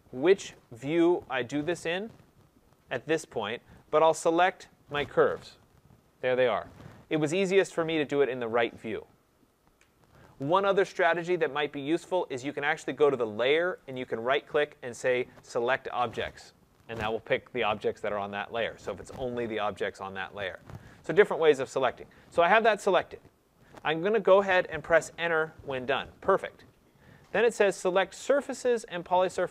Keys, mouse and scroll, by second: 13.9 right click, 14.8 right click, 15.1-18.9 right drag, 20.5-25.6 drag, 25.6 Return.